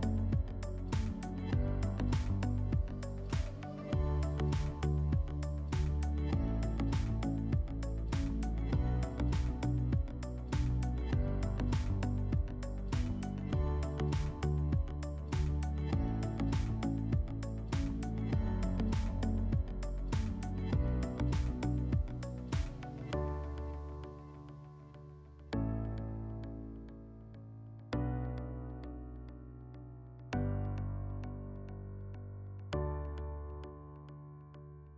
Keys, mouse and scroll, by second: 2.5-4.7 drag, 5.9-7.4 drag, 11.9-13.5 drag, 19.7 click, 23.2-24.8 drag, 25.3 click, 26.0-28.6 typing, 26.1 scroll down 2, 27.5 click, 34.0-34.9 drag.